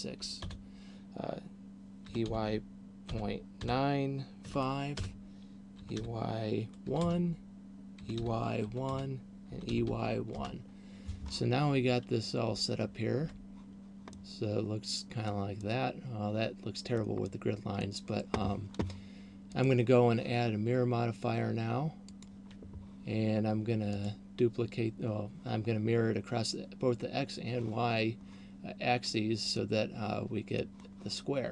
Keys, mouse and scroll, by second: 2.1 e, 5.8 e, 8.1 e, 9.6 e, 13.3 Tab, 14.3 middle click, 15.6 middle click, 17.3 middle click, 19.6 click, 23.8 click, 29.8 middle click.